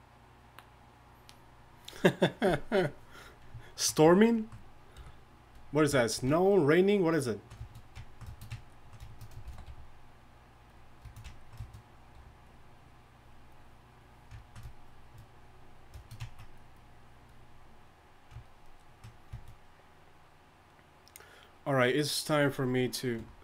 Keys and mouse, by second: 5.0 KP_1, 9.4 shift+c, 9.7 f, 12.2 f, 12.8-14.5 drag, 16.3-18.5 drag.